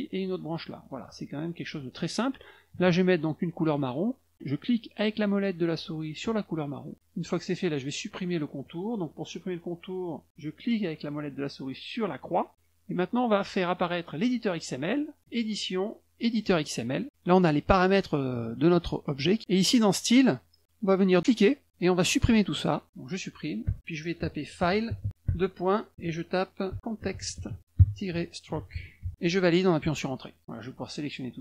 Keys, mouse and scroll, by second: 0.2 shift+click, 7.1 click, 12.2 middle click, 15.2 click, 16.2 click, 21.4 click, 22.3 click, 23.6-29.5 typing, 30.6 click.